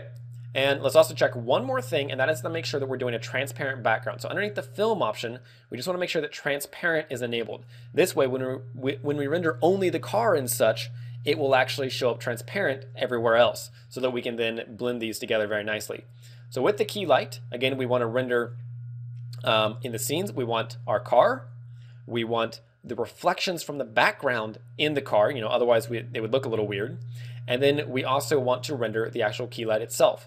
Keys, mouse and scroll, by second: 4.5 click, 7.5 click, 13.3 ctrl+w, 19.9 click, 23.3 shift+click, 26.7 shift+middle click.